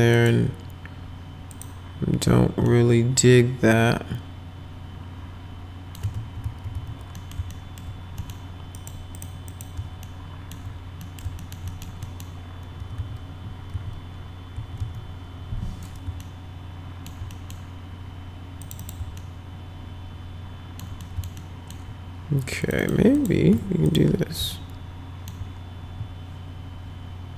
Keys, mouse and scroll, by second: 0.2 click, 1.5 click, 2.7-6.0 alt+middle drag, 6.1 ctrl+z, 6.5 ctrl+z, 6.7 ctrl+z, 7.2 middle click, 7.5 alt+middle click, 8.2 alt+middle click, 8.7 click, 9.2 click, 9.5 click, 10.1 alt+middle click, 11.0 middle click, 11.4 alt+middle click, 11.7 middle click, 12.0 middle click, 12.8 F4, 13.0 F4, 13.7 F5, 14.6 F5, 14.8 F4, 16.2 alt+middle click, 17.3 middle click, 18.6 click, 18.8 click, 19.2-20.8 alt+middle drag, 21.0 alt+middle click, 21.4 alt+middle click, 22.6 click, 22.8 click, 23.1 click, 23.8 ctrl+click, 24.6 alt+middle click.